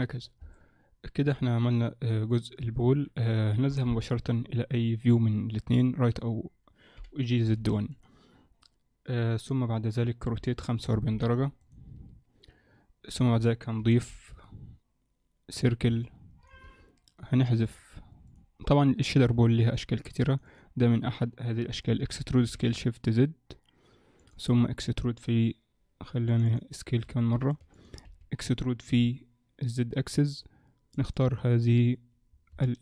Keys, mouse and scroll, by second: 0.5 middle click, 2.7 Up, 4.0 KP_1, 4.0 KP_3, 7.0 g, 10.3 r, 13.8 shift+c, 14.1 shift+a, 16.0 middle click, 16.7 Tab, 17.7 click, 18.3 click, 19.2 x, 20.3 click, 20.5 click, 21.9 e, 24.5 a, 26.3 click, 26.5 click, 26.9 s, 28.1 a, 29.0 e, 31.0 click, 32.0 click, 32.3-32.8 scroll up 3, 32.7 shift+middle click.